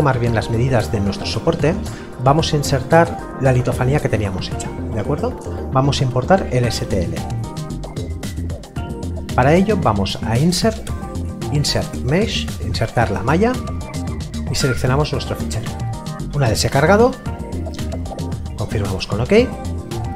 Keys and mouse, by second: 2.3 click, 8.3 click, 18.7 click.